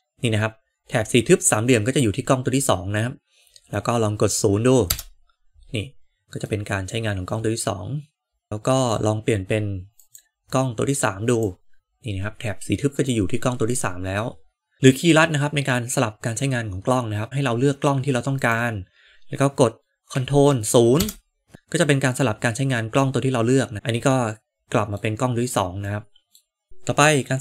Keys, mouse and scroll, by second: 4.8 KP_0, 6.4-8.9 middle drag, 9.9-11.4 drag, 13.0-14.2 middle drag, 14.7 KP_0, 18.3 click, 20.9 ctrl+KP_0, 21.5-23.7 middle drag, 24.0-24.9 middle drag, 25.9 middle click, 26.7-27.4 middle drag.